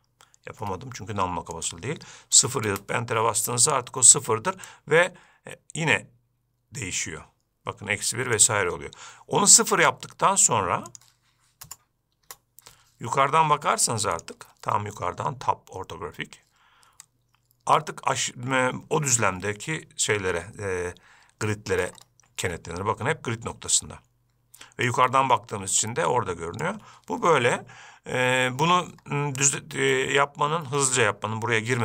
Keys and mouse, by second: 5.0-8.7 shift+drag, 11.3-12.8 drag, 17.3-21.8 shift+drag, 22.7-27.1 shift+drag, 30.2-31.1 middle drag.